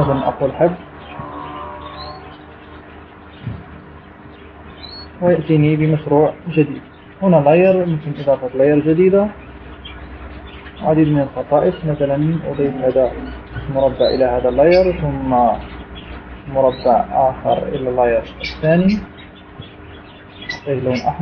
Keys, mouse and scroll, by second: 1.0 click, 1.8 click, 2.8 click, 6.0-6.4 shift+scroll down 2, 9.4 click, 10.8 click, 14.1 click, 15.3 click, 16.9 click, 19.8 click.